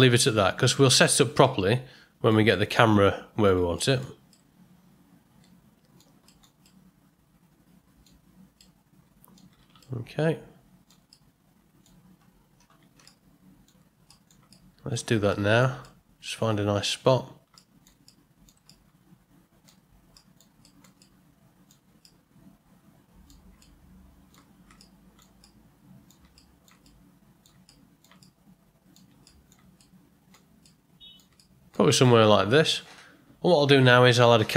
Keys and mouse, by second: 0.6 ctrl+middle drag, 0.8 ctrl+middle click, 1.4-2.3 middle drag, 2.5-3.4 ctrl+middle drag, 3.7 ctrl+middle drag, 4.3-6.0 middle drag, 6.2 ctrl+middle click, 6.6-8.0 middle drag, 8.6-9.3 middle drag, 9.8-10.8 shift+middle drag, 11.1-11.8 middle drag, 13.0-13.6 shift+middle drag, 14.0 ctrl+middle click, 14.2 ctrl+middle click, 14.5-14.9 shift+middle drag, 15.3 middle click, 15.8 ctrl+middle drag, 16.0 ctrl+middle drag, 17.5-17.8 shift+middle drag, 18.0-18.4 middle drag, 18.6-19.6 ctrl+middle drag, 20.1 middle drag, 20.6 ctrl+middle drag, 21.0-21.6 middle drag, 22.0-23.2 middle drag, 23.6-24.3 ctrl+middle drag, 24.8 shift+middle click, 25.4-26.1 middle drag, 26.3 shift+middle click, 26.8-27.4 middle drag, 27.6-28.0 shift+middle drag, 28.2-28.9 middle drag, 29.2 shift+middle click, 29.7-30.3 ctrl+middle drag, 30.6 middle click, 31.3-31.7 ctrl+middle drag, 32.0-32.7 shift+middle drag.